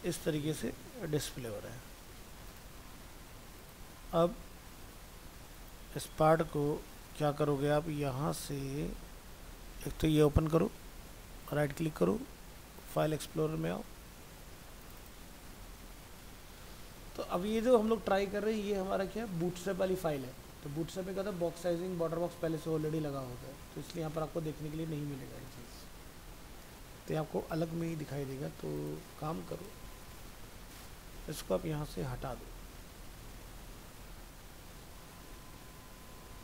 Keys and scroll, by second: 1.4 alt+Tab, 36.3 ctrl+x.